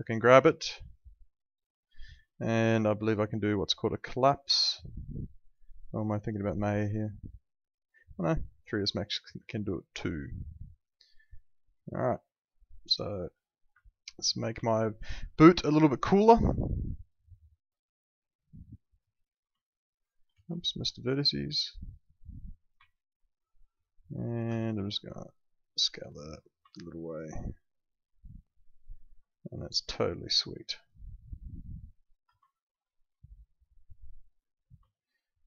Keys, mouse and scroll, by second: 8.7 click, 9.4 alt+middle click, 13.4 middle click, 13.8 alt+middle click, 14.6 alt+middle click, 15.8 click, 19.7 alt+middle click, 20.3 ctrl+z, 20.8 click, 22.8 alt+middle click, 24.2 alt+middle click, 24.5 r, 25.7 click, 26.7 alt+middle click, 30.7 click, 32.0 ctrl+click, 33.3 click, 34.9 alt+middle click.